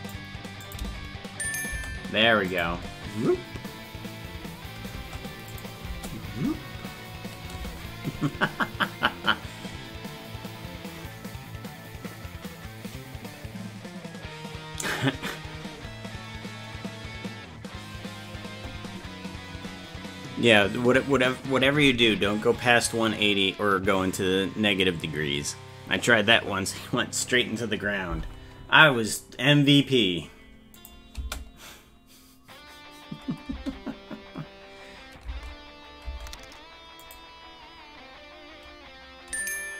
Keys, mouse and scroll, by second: 0.6 click, 2.5 click, 2.6 space, 3.5-4.9 scroll up 1, 4.9-5.5 scroll up 3, 4.9 space, 5.5 click, 5.8 space, 30.7 click, 31.1 space, 37.0 click.